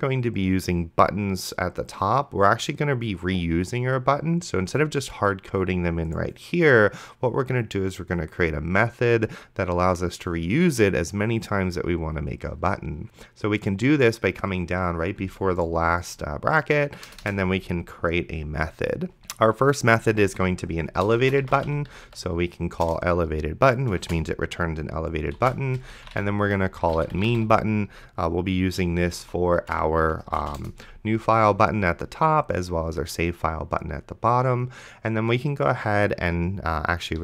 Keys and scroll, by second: 17.4 Return, 20.3-22.1 typing, 22.9 Return, 24.0 space, 25.4-28.1 typing, 29.5 shift+9, 29.9 0, 30.2 space, 30.6 Return, 37.1-37.2 typing.